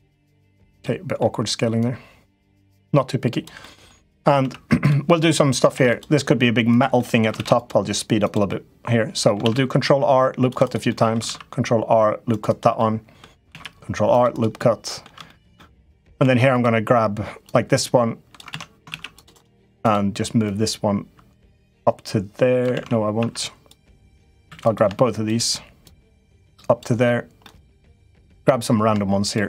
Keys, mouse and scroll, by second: 0.7 middle click, 1.6 click, 2.7 click, 3.5 middle click, 3.8 click, 4.2 Tab, 4.6 click, 5.5 ctrl+r, 6.9 middle click, 7.1 ctrl+r, 8.4 middle click, 9.2 ctrl+r, 10.8 middle click, 11.0 ctrl+r, 12.6 middle click, 13.3 ctrl+r, 14.3 middle click, 15.1 shift+middle click, 15.5 middle click, 16.0 2, 16.3 click, 17.3 click, 18.3 ctrl+z, 18.6 ctrl+r, 19.3 2, 19.6 click, 20.3-22.4 drag, 22.5 ctrl+z, 23.0 1, 24.3 2, 24.4 click, 25.1 shift+click, 25.6-26.6 drag, 27.3 middle click, 27.9 click, 29.0 shift+click, 29.3 middle click.